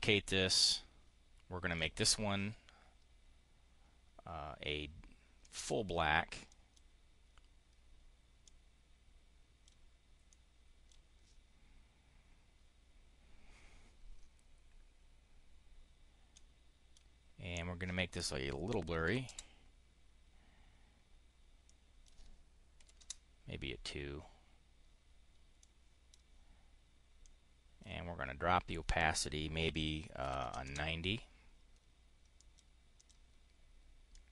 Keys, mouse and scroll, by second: 1.6 click, 5.3 click, 6.4 click, 8.3-9.6 drag, 10.2 click, 16.2 click, 19.0 3, 21.6 click, 22.6 2, 22.8 Return, 25.4 click, 27.1 click, 30.1 9, 32.2 click, 32.8 click, 33.9-34.3 drag.